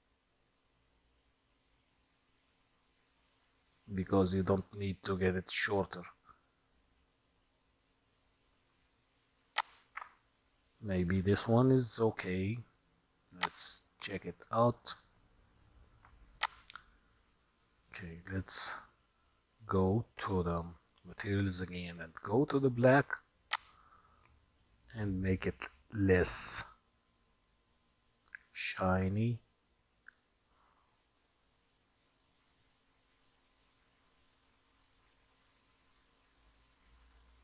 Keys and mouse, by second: 9.7-10.1 shift+z, 13.5 click, 16.5 click, 23.5 click, 24.7 click, 28.1-29.5 drag, 31.5-33.6 drag, 35.1-37.4 drag.